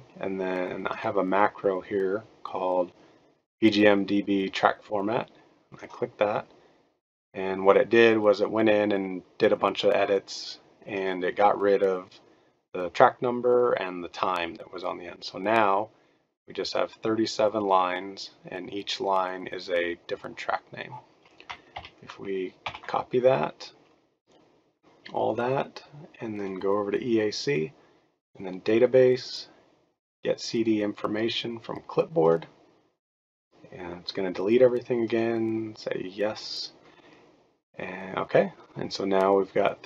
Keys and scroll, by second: 21.7 ctrl+a, 22.6 ctrl+c.